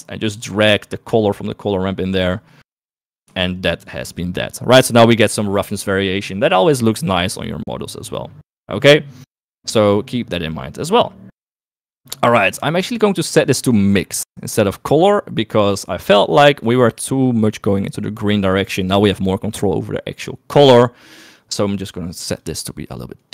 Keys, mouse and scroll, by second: 0.1 right click, 0.8-2.5 drag, 2.9 right click, 3.7 ctrl+shift+click, 4.2 click, 8.4 middle click, 12.0-13.9 drag, 17.7 middle click, 21.2 click.